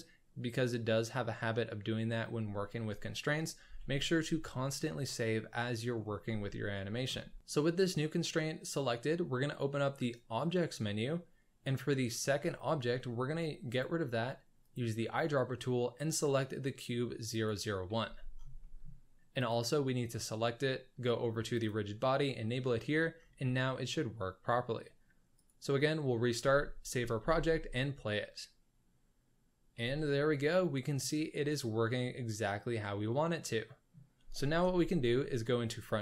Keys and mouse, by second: 3.7 ctrl+s, 4.7-6.1 middle drag, 6.4-7.0 shift+middle drag, 10.0 click, 13.7 click, 14.6 click, 18.0 z, 18.6 middle drag, 21.5 click, 23.4-23.9 middle drag, 25.3 click, 26.5 ctrl+s, 27.2 space, 29.4 c, 29.8 space, 30.1-31.0 middle drag, 31.0 click, 31.0-32.5 middle drag, 32.5 drag, 32.6 middle drag, 32.7 click, 32.8-33.9 middle drag, 34.6 KP_1.